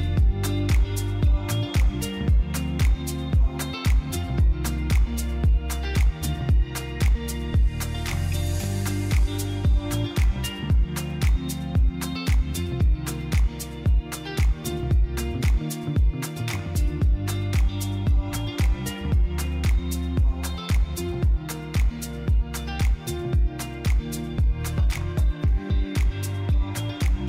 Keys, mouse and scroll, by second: 0.9 click, 1.3 click, 2.1 middle click, 3.7 KP_3, 5.3 s, 6.7 click, 8.9 click, 9.3 middle click, 12.9 click, 13.2 middle click, 14.6 KP_3, 15.8 g, 16.1 z, 17.2 click, 17.5 click, 19.4 click, 20.7 shift+click, 22.6 shift+a, 25.2 s, 26.4 click.